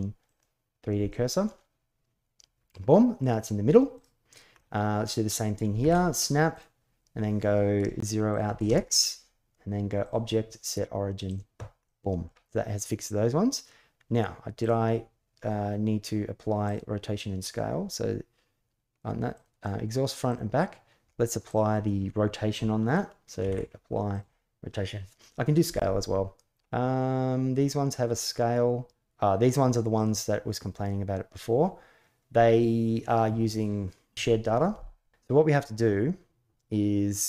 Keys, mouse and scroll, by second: 0.8 drag, 1.0-3.0 middle drag, 4.3-5.1 middle drag, 5.6 shift+s, 8.1 click, 9.8-11.1 drag, 11.6-12.1 middle drag, 14.4 click, 16.4 click, 19.1 click, 20.1 click, 23.2 ctrl+a, 31.4 middle drag.